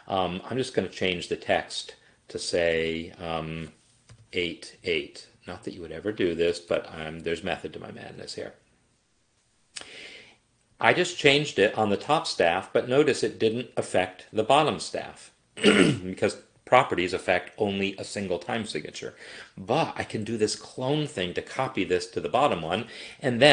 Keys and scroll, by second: 4.1 8, 6.7 8.